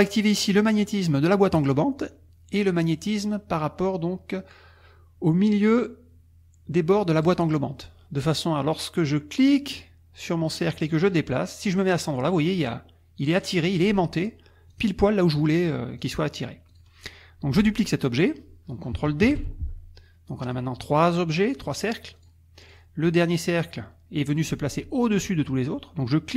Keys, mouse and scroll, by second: 1.6 click, 7.2 click, 9.5-14.4 drag, 14.7 click, 16.0 click, 16.7 click, 19.2 ctrl+d, 20.4 click, 20.9 click, 21.3 click, 21.7 click, 22.2 click, 22.6 click.